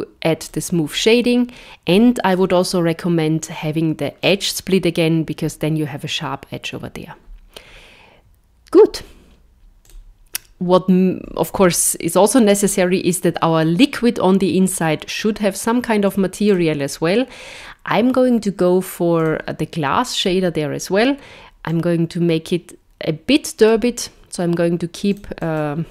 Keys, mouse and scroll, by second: 2.3 click, 9.9 click, 14.7 click, 16.5 click, 19.2 click, 21.7 click, 25.1 click.